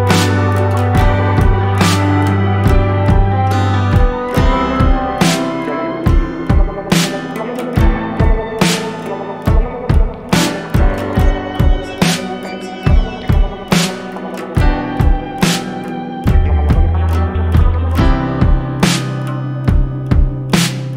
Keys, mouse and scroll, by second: 17.8 right click, 18.7 click.